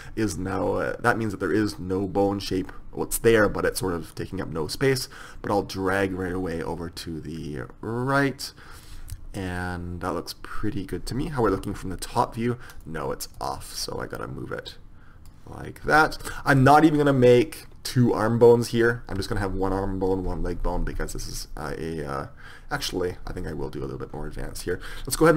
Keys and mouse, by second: 5.0-6.8 drag, 11.7 KP_7, 12.8-15.2 right drag, 16.0 KP_1, 17.0-19.0 middle drag, 24.7 click.